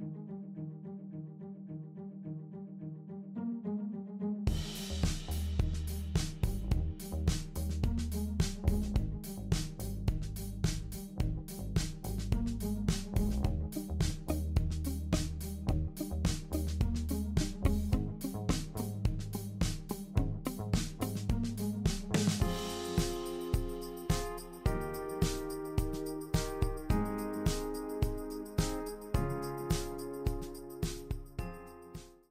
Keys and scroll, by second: 0.0 BackSpace, 6.6 super+c, 6.8 super+v.